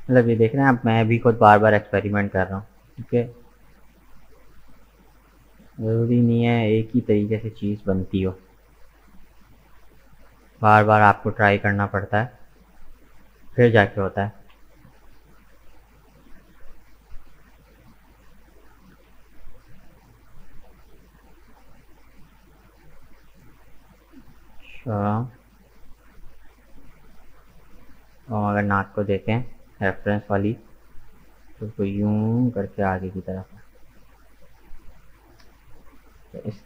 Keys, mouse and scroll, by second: 0.4-2.0 middle drag, 2.0 right click, 2.8 g, 7.4-8.5 middle drag, 8.5 scroll up 2, 8.8-11.9 middle drag, 11.9 right click, 13.2 shift+right click, 14.0 g, 17.5 right click, 18.6 g, 21.3-24.4 middle drag, 24.9-36.6 middle drag.